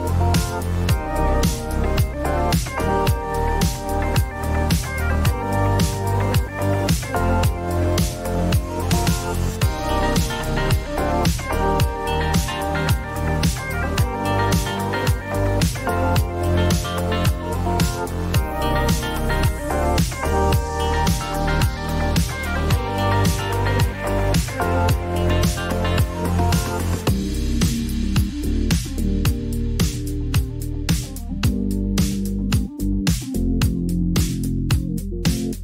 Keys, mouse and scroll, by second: 0.1 click, 0.7 click, 1.5-2.1 typing, 3.2 click, 3.2 click, 4.9 click, 5.8-6.7 typing, 6.9 click, 7.6 click, 8.5 ctrl+d, 10.1 click, 10.5 typing, 11.0 Return, 13.1 typing, 14.6 click, 15.2 r, 17.0 click, 19.7 click, 20.0-20.3 typing, 21.2 Return, 22.6 click, 22.7-23.4 typing, 23.6 Return, 24.9 click, 25.2 typing, 25.8 Return, 27.0-27.7 typing, 27.2 click, 27.8 ctrl+d, 29.0 click, 31.3 click, 32.8 click, 33.8 click, 35.4 r.